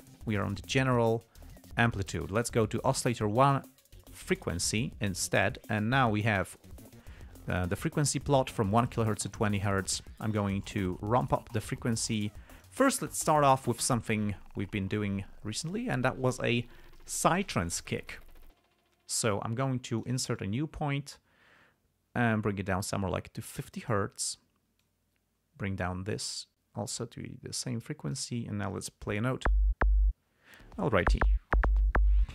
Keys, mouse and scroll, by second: 0.0 click, 1.2 click, 2.2 click, 3.2 click, 4.6 click, 11.0-13.2 drag, 14.5 click, 20.3 click, 20.7-24.5 drag, 25.2-28.7 drag.